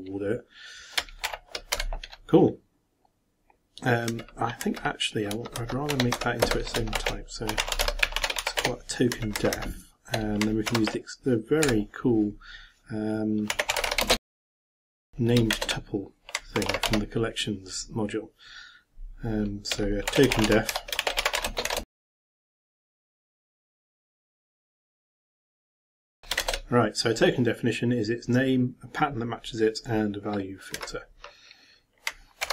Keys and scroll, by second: 1.2 shift+0, 1.7 shift+,, 6.9-9.1 typing, 9.1 shift+Up, 10.7 ctrl+m, 15.5 shift+Return, 16.6 ctrl+m, 16.8 ctrl+a, 19.8-23.1 typing, 24.4-26.6 typing, 32.4 ctrl+m.